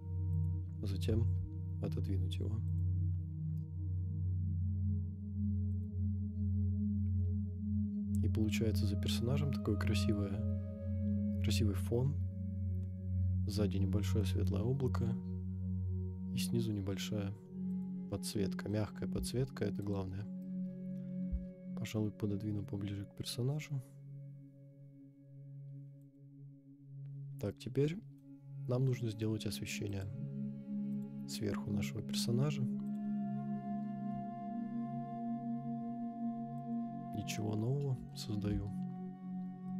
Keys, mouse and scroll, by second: 0.4 click, 1.1 g, 1.2 y, 2.8 click, 3.7 KP_0, 5.7 click, 6.6-7.1 scroll down 2, 7.3 scroll up 1, 8.6 scroll up 1, 12.3 scroll down 1, 17.7 click, 18.3 middle click, 19.1 g, 19.8 right click, 20.5 KP_0, 21.3 g, 26.2 click, 27.4-28.2 middle drag, 28.3 scroll down 2, 29.9 click, 30.9-33.1 drag, 34.0 g, 34.1 z, 36.7 click, 37.3-38.1 middle drag, 39.6-39.7 shift+middle drag.